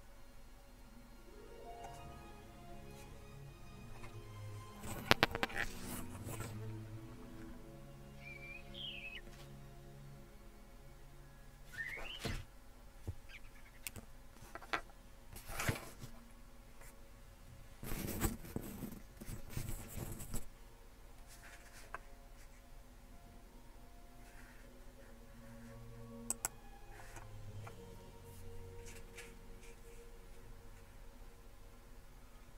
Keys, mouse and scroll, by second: 26.3-32.5 drag.